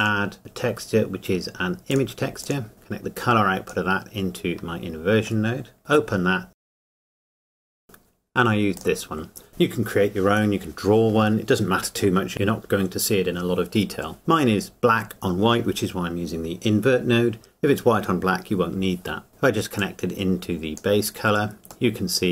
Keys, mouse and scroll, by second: 0.0 click, 1.9 click, 5.5 shift+middle click, 5.8 click, 6.7 click, 6.8 click, 7.0 click, 7.1-7.5 scroll down 2, 7.2 click, 7.3 shift+a, 7.3 BackSpace, 7.3 click, 7.5 click, 7.6 click, 8.8 click, 19.3 shift+middle click, 19.8 click, 21.9 middle click.